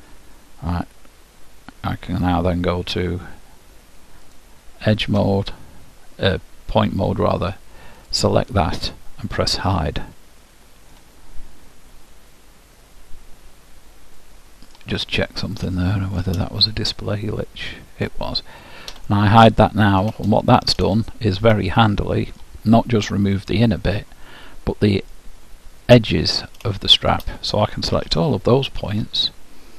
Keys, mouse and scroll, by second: 4.4-6.1 drag, 8.2-9.9 drag, 9.9-11.8 middle drag, 14.4-19.0 middle drag, 19.0 h, 19.5 middle click, 21.1-25.1 middle drag, 25.2 middle click, 25.8-26.4 scroll down 1, 26.4-26.9 scroll down 1, 26.9-28.7 middle drag, 28.1 a.